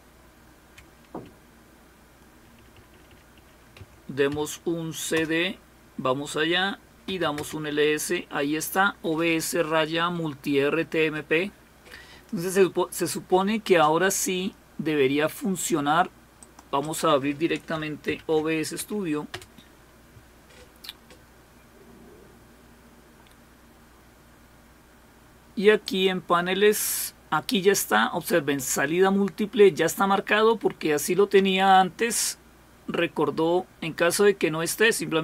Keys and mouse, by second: 1.2 Delete, 1.9 Delete, 1.9 Delete, 2.2-3.8 Delete, 7.0-7.8 typing, 16.4 click, 18.1 alt+super+d, 19.3 Return, 25.8 click.